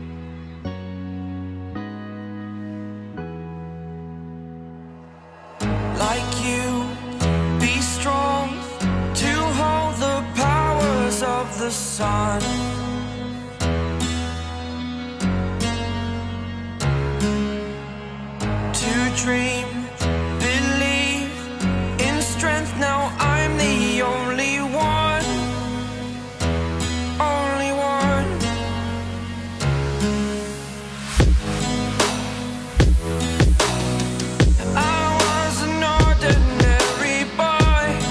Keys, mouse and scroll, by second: 0.7 scroll up 2, 0.8 middle click, 1.3 Escape, 1.5 Escape, 2.4 double click, 4.4 Delete, 20.9 scroll down 1, 21.3 Escape, 21.5 Escape, 24.8 ctrl+click, 25.1 middle click, 26.8 ctrl+click, 31.0-32.3 scroll down 2, 31.3 shift+middle click, 34.4 ctrl+click, 36.1 ctrl+click, 36.2 ctrl+click.